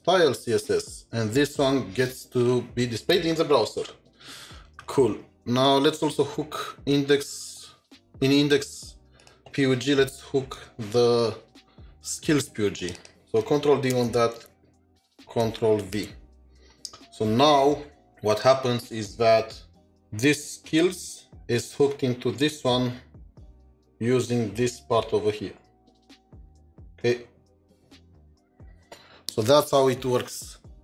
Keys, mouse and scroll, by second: 3.6 ctrl+shift+7, 5.4 scroll up 2, 10.2 scroll, 10.6 alt+shift+Down, 12.9 alt+shift+Down, 13.9 ctrl+d, 14.4 typing, 19.8 ctrl+shift+4, 27.8 ctrl+shift+4, 27.9 double click.